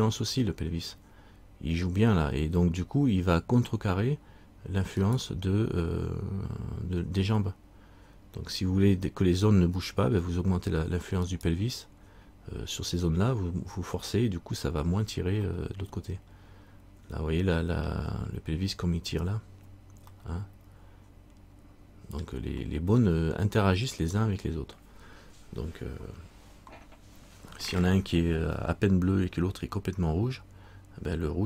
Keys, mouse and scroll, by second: 5.2 right click, 11.4 right click, 15.7 middle click, 20.3 middle click, 24.1 right click.